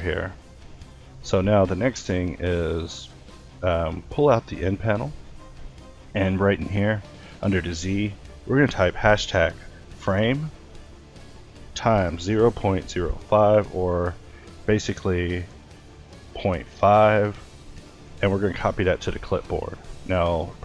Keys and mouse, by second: 3.6 n, 13.1 BackSpace.